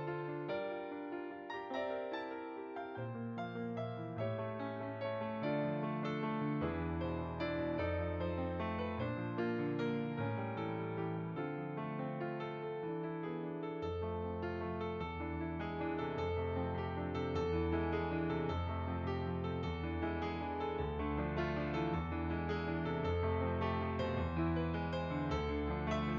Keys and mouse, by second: 1.4 shift+click, 1.9 click, 3.9 shift+click, 4.4 click, 9.4 middle click, 10.3 click, 11.7 middle click, 12.5 click, 13.3 shift+click, 15.6 click, 17.3 f, 17.6 click, 24.2 click, 25.8 click.